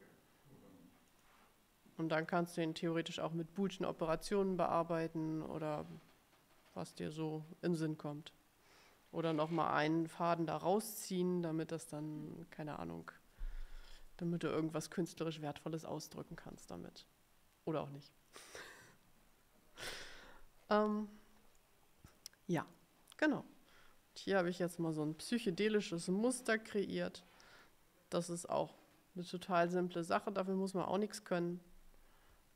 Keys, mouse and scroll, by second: 1.2 click, 2.4 click, 20.3-21.3 scroll down 2, 21.7 middle click, 21.9-23.1 drag, 24.4 middle click, 25.3-26.0 ctrl+scroll up 4, 27.7-28.8 drag.